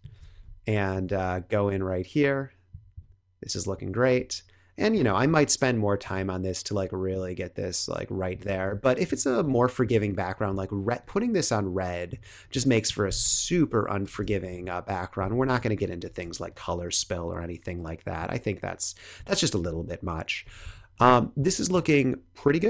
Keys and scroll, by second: 0.1 space, 5.0 space, 6.1 space, 8.4 space, 12.4 space, 13.2 super+-, 14.2 space, 15.7 super+=, 16.2 space, 19.5 super+0, 20.6 space.